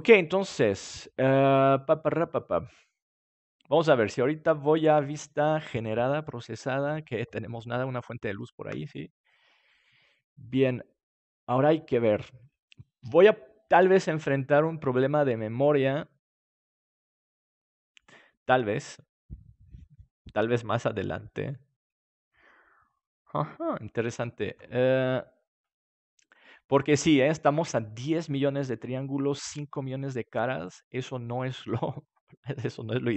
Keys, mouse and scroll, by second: 2.0-5.3 middle drag, 5.3-9.0 drag, 25.4-27.4 drag.